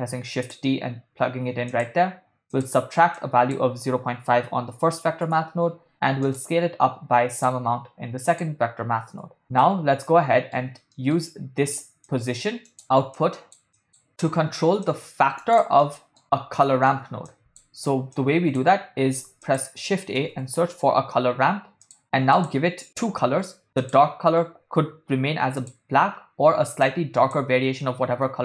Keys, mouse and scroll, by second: 0.1 shift+d, 1.7-2.7 drag, 3.2-5.3 drag, 6.3-7.5 drag, 8.3 click, 9.6 middle click, 10.9 middle click, 12.1-12.8 drag, 13.1 middle click, 13.1 scroll down 1, 13.2 click, 13.8 click, 14.8-15.4 drag, 15.8 middle click, 16.7 middle click, 17.3 click, 18.2 click, 19.3 shift+a, 23.8 click, 25.6 click.